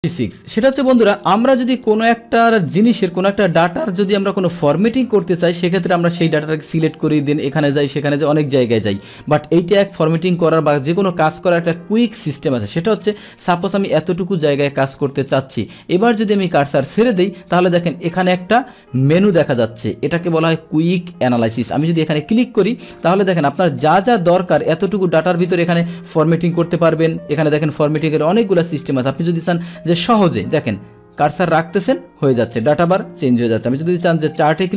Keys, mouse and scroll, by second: 0.0 click, 0.8 Delete, 1.1 click, 1.8-6.9 drag, 8.9 click, 13.5-16.6 drag, 22.1 click, 33.8 click.